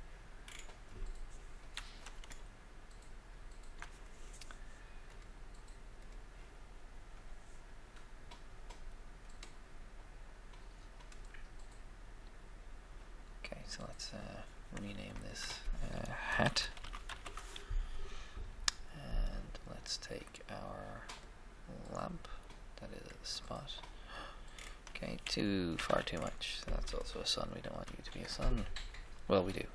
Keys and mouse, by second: 0.4 middle click, 2.4 shift+middle click, 5.1-6.9 drag, 9.2 middle click, 10.0 middle click, 15.1-16.9 ctrl+drag, 16.4 shift+h, 16.7 a, 17.1 Return, 21.0-22.9 drag, 23.2-24.9 drag, 25.7 z, 25.7 z, 27.3 1, 27.5 KP_1, 27.7 3, 27.9 KP_3.